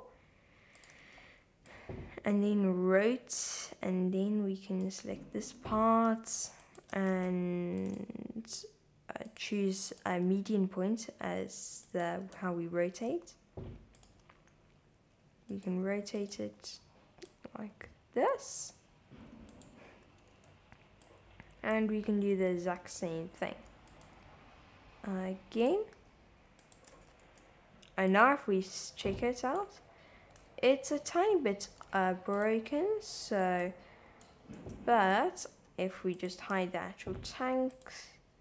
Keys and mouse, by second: 0.8 click, 1.0 shift+z, 1.6-4.9 drag, 6.1 g, 6.2 x, 6.6 click, 7.0 super+z, 7.2 r, 7.8 super+click, 7.9 super+z, 9.4 click, 10.2 r, 11.9 click, 12.5 super+z, 13.1 g, 14.0 click, 14.3 r, 15.5 click, 15.7 g, 16.2 click, 16.4 shift+z, 17.3-18.7 drag, 19.6 click, 20.4 shift+z, 21.2 click, 22.0 r, 23.9 click, 24.1 g, 25.6 click, 25.9 r, 26.6 click, 26.9 shift+z, 27.3 Tab, 28.2-29.6 drag, 29.7 Tab, 30.5 super+z, 31.2 super+z, 31.9 shift+z, 33.8-34.2 drag, 34.6 Tab, 35.1 click, 35.6 shift+z, 37.7 click.